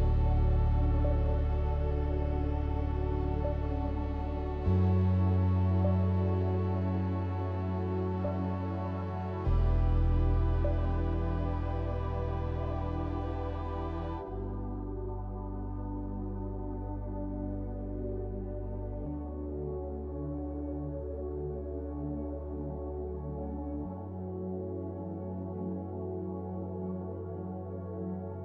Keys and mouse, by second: 8.1 click, 19.6 click.